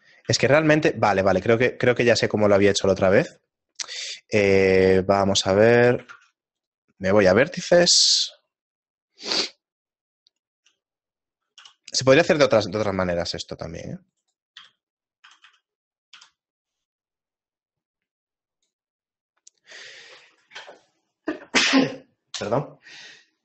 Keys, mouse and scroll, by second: 0.4 a, 0.9 middle click, 1.5-3.1 scroll down 2, 4.0 shift+middle click, 6.1 ctrl+Tab, 7.8 KP_1, 8.8 middle click, 9.6-10.3 scroll up 3, 10.0 middle click, 10.3-10.7 scroll down 1, 10.7 middle click, 11.6 b, 14.2 right click, 14.6 z, 15.2 a, 15.4 a, 16.2 b.